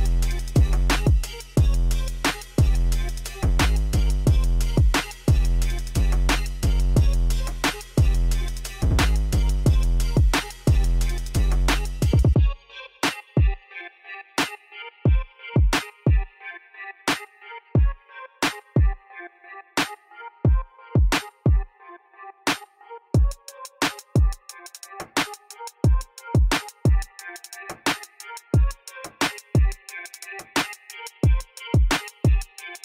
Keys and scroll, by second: 6.0 ctrl++, 12.6 Tab.